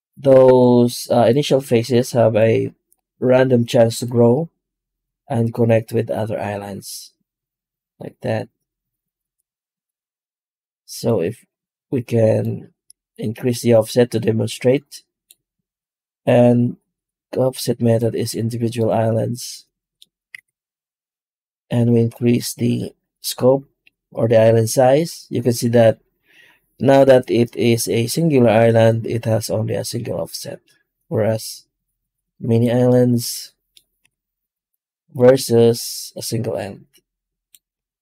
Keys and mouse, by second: 20.2 F9, 33.9 F9.